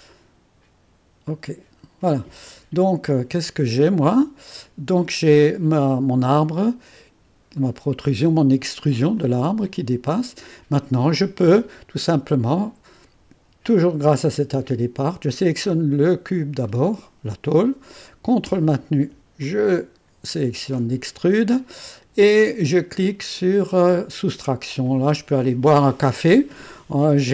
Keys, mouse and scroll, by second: 1.3 click, 2.5 click, 3.1-7.3 drag, 7.6 click, 9.2-10.8 drag, 16.0 click, 16.6 click, 19.4-21.1 drag, 24.3 click.